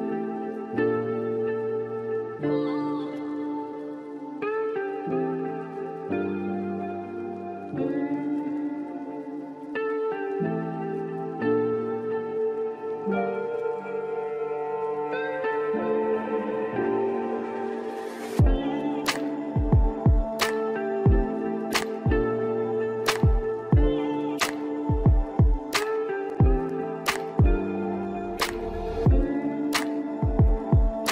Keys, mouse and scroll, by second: 3.6-8.9 drag, 9.4-12.5 drag, 13.4-16.4 drag, 16.8-19.6 drag, 19.6 scroll down 1, 19.8-21.6 middle drag, 21.6-22.5 scroll up 2, 22.5-25.5 middle drag, 25.5-26.1 scroll down 9, 26.1-31.1 middle drag.